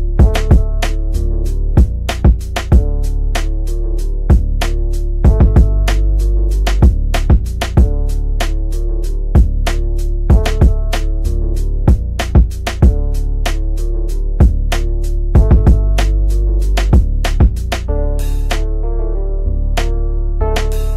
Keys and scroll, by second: 2.9 d, 5.4 f, 11.6 F3, 12.0 Escape, 14.1 shift+F2, 14.8 F9.